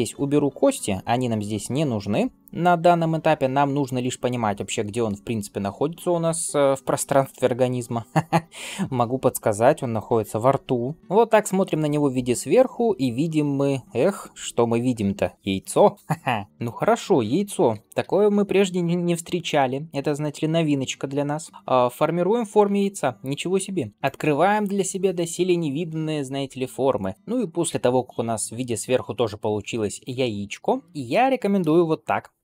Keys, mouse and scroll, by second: 16.5 click, 17.5 g, 19.3-21.4 drag, 21.4 g, 23.1 click, 23.9 g, 26.0-27.1 drag, 27.1 middle click, 27.1 scroll down 1, 30.1 shift+middle click, 30.5 scroll up 1, 30.9 shift+middle click, 32.2 ctrl+r.